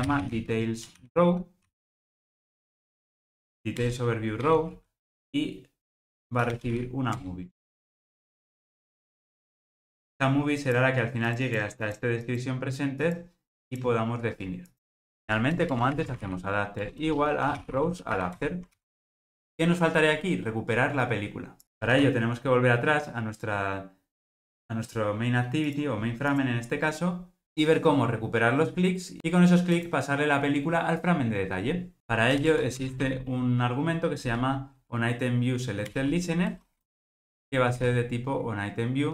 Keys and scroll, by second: 4.0 Return, 7.6 alt+super+l, 16.9 Return, 18.7 alt+super+l, 36.0 Return.